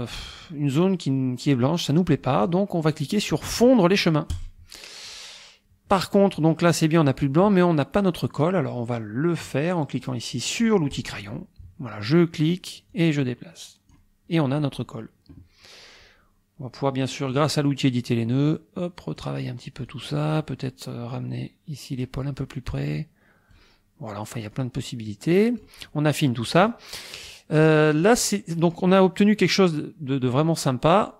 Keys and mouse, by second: 4.3 click, 11.0 click, 12.9-14.1 drag, 17.3 click, 18.5 click, 19.9 click, 21.2-22.2 drag, 22.8-23.8 drag, 24.5-25.8 drag, 28.0 click, 29.5-30.5 drag, 31.0 click.